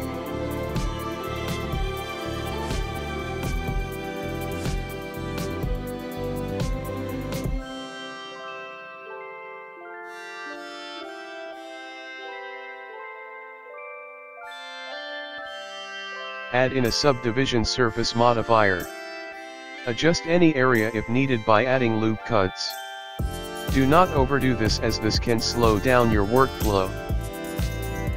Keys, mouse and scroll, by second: 0.9 ctrl+r, 3.8-4.6 scroll up 4, 4.6 scroll up 1, 4.9 g, 8.1 middle click, 9.6 ctrl+r, 12.2 ctrl+r, 12.2 ctrl+r, 14.7 middle click, 15.2 KP_1, 15.9 middle click, 15.9 scroll down 6, 17.2 click, 19.7 Tab, 19.7 click, 19.9 middle click, 22.5 scroll up 2, 23.7 scroll up 3, 23.7 Tab, 24.1 middle click, 24.3 KP_1, 24.8 middle click, 25.7-26.0 scroll up 4, 26.4 click, 26.8 click, 27.0 middle click, 27.6 KP_1, 28.0 click.